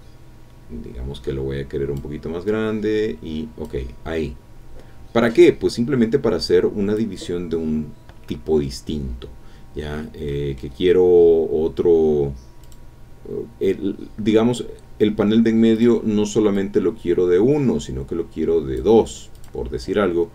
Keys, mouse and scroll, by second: 2.5-3.8 drag, 4.2 scroll down 2, 5.3-7.1 drag, 9.8 scroll down 1, 10.3 middle click, 10.5 click, 10.5 scroll down 1, 10.6 scroll up 1, 10.8-12.5 scroll down 1, 12.6 click, 14.8 scroll up 1, 15.7 click, 16.5-18.9 drag, 19.3 click.